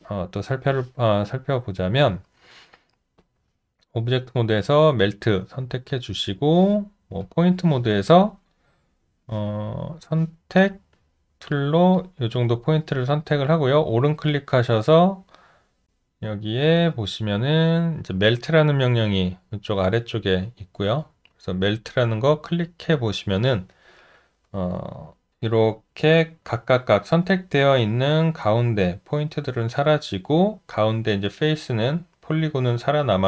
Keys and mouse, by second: 5.9 alt+click.